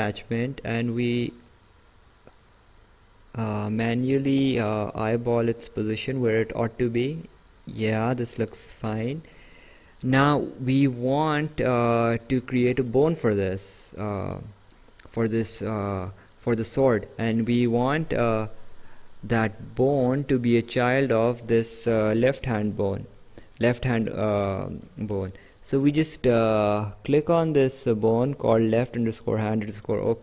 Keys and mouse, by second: 0.2 click, 8.6 right click, 12.6 right click, 13.9 right click, 15.9 right click, 22.2 click, 24.3 right click, 29.9 right click.